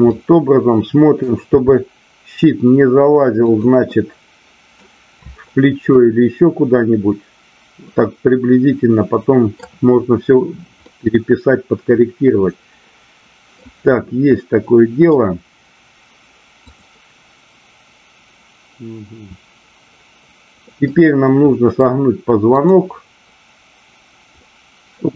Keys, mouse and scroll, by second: 0.1-1.2 middle drag, 3.9-4.9 middle drag, 5.8-9.5 middle drag, 10.9-13.5 middle drag, 14.3-15.2 middle drag, 16.6-17.8 drag, 20.8-21.8 middle drag, 22.5-23.6 drag, 24.3-25.1 middle drag.